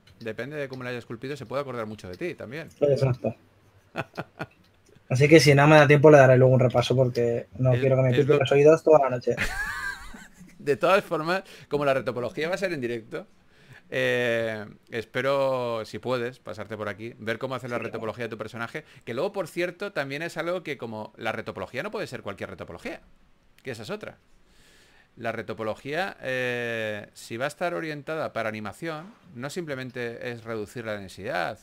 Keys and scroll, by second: 3.8 4, 7.1-8.3 typing, 11.2 2, 15.4 4, 19.2-20.2 typing, 21.3 typing, 23.6-25.0 typing, 30.5-31.6 typing.